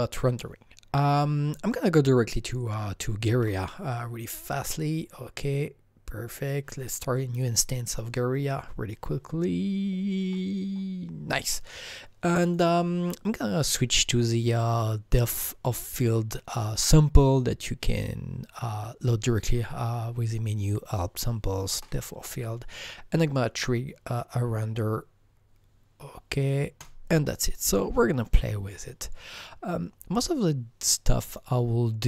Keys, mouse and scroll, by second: 3.3 super+d, 4.5 click, 4.6 super+d, 4.6 double click, 12.5 super+d, 12.5 click, 19.3 click, 23.1 click, 26.8 click, 26.8 click, 27.6 click, 27.7 double click, 31.3 click.